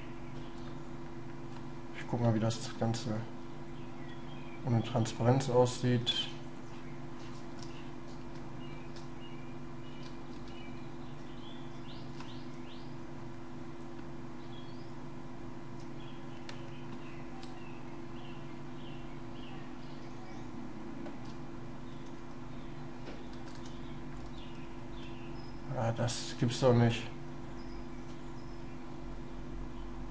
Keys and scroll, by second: 7.6 shift+space, 17.6 shift+space, 25.0 space.